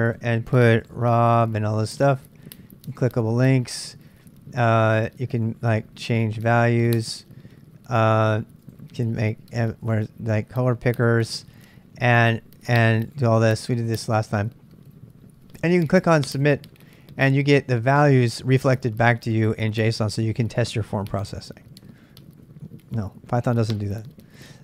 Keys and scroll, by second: 0.7-1.5 typing, 2.8-3.9 typing.